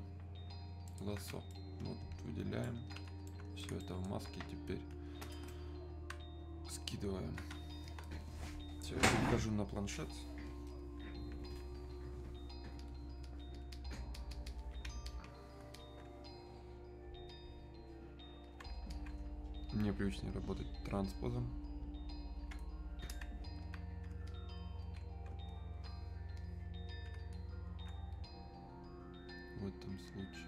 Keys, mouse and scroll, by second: 3.3 alt+right click, 7.5 alt+right click, 11.9 alt+right click, 12.8-23.7 ctrl+drag, 23.7-30.4 alt+drag.